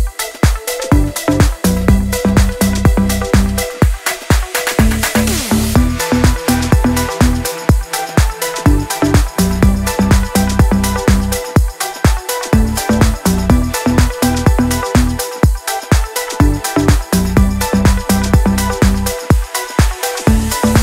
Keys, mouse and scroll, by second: 10.9 click, 11.3-11.7 scroll down 1, 11.7-15.6 drag, 15.6 ctrl+a, 17.0 click, 17.6 ctrl+z, 18.0 click, 18.8 ctrl+d, 19.3 click, 20.2-20.8 alt+drag.